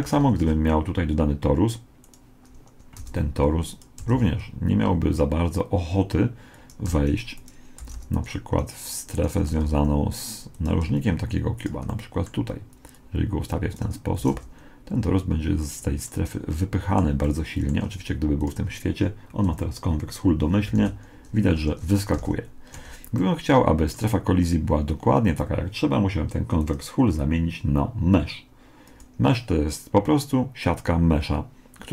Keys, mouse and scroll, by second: 0.1 shift+a, 3.0 g, 4.0 g, 6.9 g, 7.9 r, 9.5 r, 10.9 g, 11.9-12.9 middle drag, 12.9-14.7 drag, 14.3 r, 16.1-19.0 middle drag, 18.4-20.1 drag, 20.7 alt+a, 21.7 Escape, 22.2 alt+a, 22.8 Escape, 23.2-24.2 middle drag, 26.6-28.4 drag.